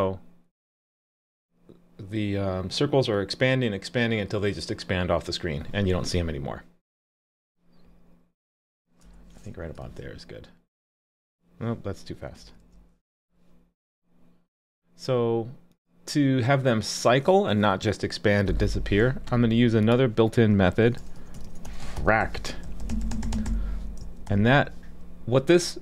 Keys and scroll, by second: 9.8 super+s, 12.6 super+s.